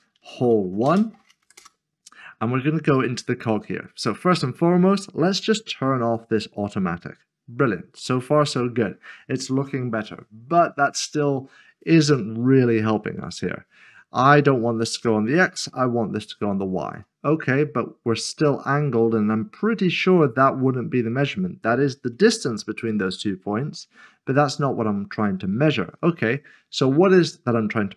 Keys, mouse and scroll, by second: 0.2-1.4 typing, 1.6 Return, 3.6 click, 3.8 scroll down 1, 6.2 click, 14.4 click, 15.5 Return, 17.2 click.